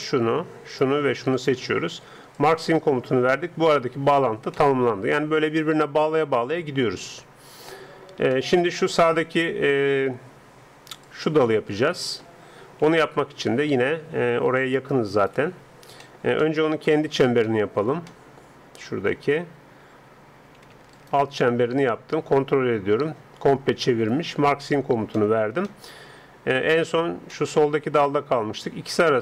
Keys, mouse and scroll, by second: 2.4-4.3 drag, 4.6-6.2 middle drag, 8.4-10.6 middle drag, 11.0 d, 11.0-15.3 drag, 12.2 d, 12.9-15.3 right drag, 12.9 d, 15.3 d, 15.6 d, 18.3-19.7 middle drag, 19.7 a, 19.8 middle click, 20.1 a, 20.4 a, 20.9-22.8 middle drag, 22.9 middle click, 24.6-26.6 drag, 25.2 middle click, 26.3-29.1 middle drag.